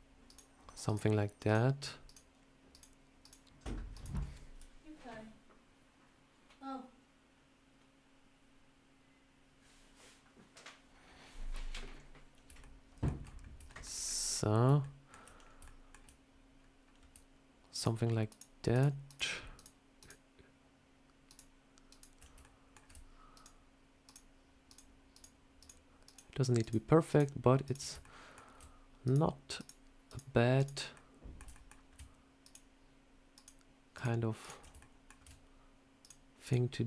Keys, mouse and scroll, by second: 1.0 ctrl+right click, 6.1 ctrl+right click, 11.7 scroll up 3, 12.5 shift+middle click, 13.0 shift+scroll down 4, 13.5 shift+middle click, 13.9-14.5 scroll up 4, 14.7 ctrl+middle click, 15.3 scroll up 2, 15.5 shift+middle click, 16.5 scroll down 2, 17.6-19.5 ctrl+right click, 22.3 ctrl+right click, 22.3 shift+middle click, 23.2-27.9 ctrl+right click, 27.9 shift+middle click, 28.9 ctrl+right click, 30.8 ctrl+middle click, 31.4 shift+middle click, 32.3 ctrl+right click, 34.3 ctrl+right click, 34.7 shift+middle click, 35.9 ctrl+right click.